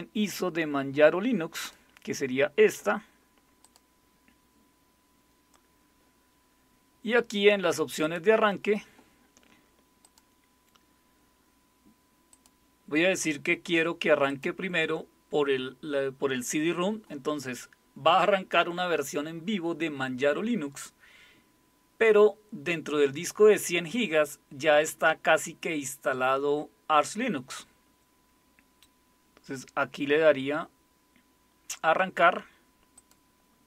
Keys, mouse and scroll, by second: 1.6 click, 3.6 click, 8.0 click, 10.0 click, 12.3 click, 14.3 click, 32.9 click.